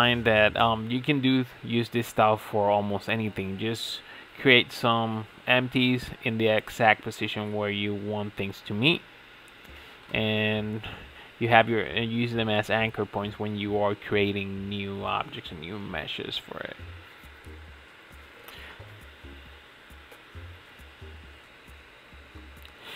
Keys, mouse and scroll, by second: 0.1 middle click, 0.8 alt+shift+click, 1.3 alt+shift+click, 1.6 alt+shift+click, 1.9 middle click, 2.6 ctrl+b, 4.0 right click, 4.5 scroll up 5, 4.8-7.9 shift+middle drag, 7.9 alt+click, 8.7 s, 10.7 alt+click, 11.1 s, 13.0 shift+middle click, 13.8 g, 14.9 alt+click, 15.9 g, 17.0 s, 18.1 middle click, 18.8 3, 19.1 click, 19.5 middle click, 19.8 g, 21.2-21.6 middle drag, 21.6 Tab, 21.8-22.1 scroll down 6, 22.1-22.9 middle drag.